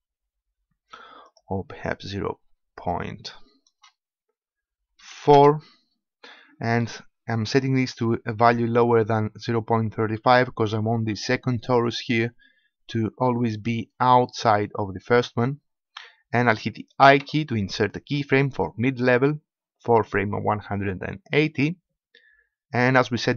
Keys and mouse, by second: 1.2-4.8 drag, 17.2 |, 22.9-23.3 drag.